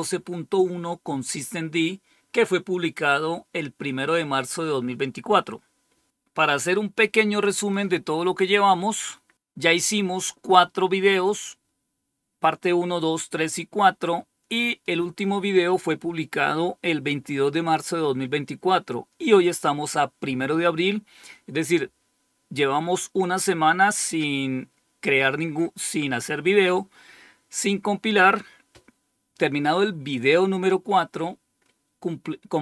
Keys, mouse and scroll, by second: 7.4 click.